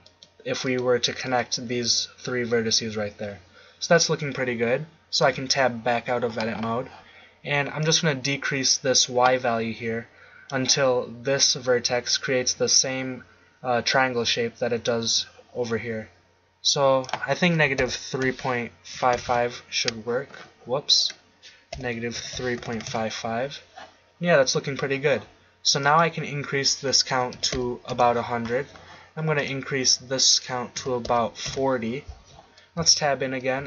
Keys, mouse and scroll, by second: 0.0-2.1 right drag, 5.2 Tab, 7.8 click, 9.8-17.0 middle drag, 19.1 5, 21.0-22.7 drag, 22.7 5, 27.5 0, 32.8 Tab, 33.5 a.